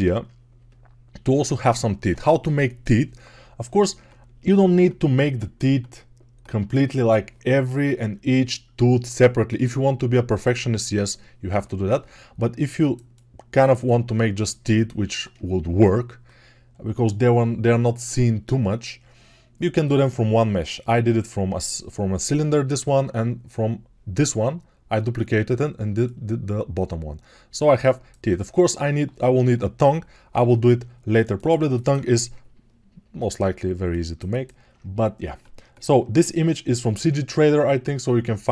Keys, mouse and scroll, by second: 0.1-16.4 alt+middle drag, 12.5-33.2 alt+drag, 33.2-38.5 alt+middle drag.